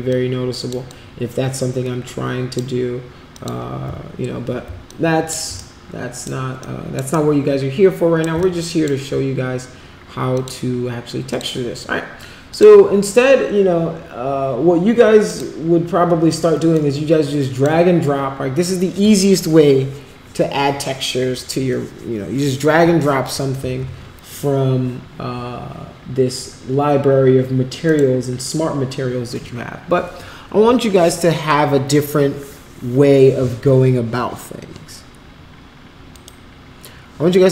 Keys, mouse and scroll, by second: 0.0-0.6 drag, 0.8-2.5 drag, 3.3 click, 4.8 alt+click, 5.7 shift+right click, 6.6 shift+click, 7.1-8.3 shift+right drag, 8.3 alt+click, 10.3 click, 11.2 click, 12.5 click, 15.2 click, 16.7 click, 23.6 ctrl+z, 27.8 click, 36.1 click.